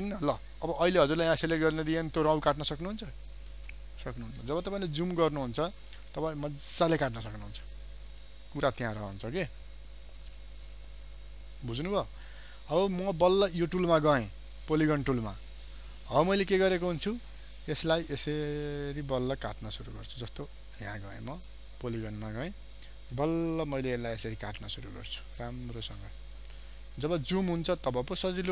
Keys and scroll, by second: 4.5 ctrl+space, 8.8 ctrl+0, 9.6 ctrl+space.